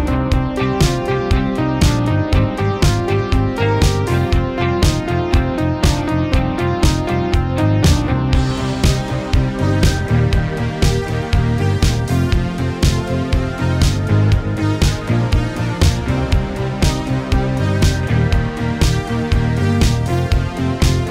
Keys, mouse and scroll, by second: 0.0-1.0 typing, 2.3-14.6 drag, 19.4-19.9 typing, 19.9 click.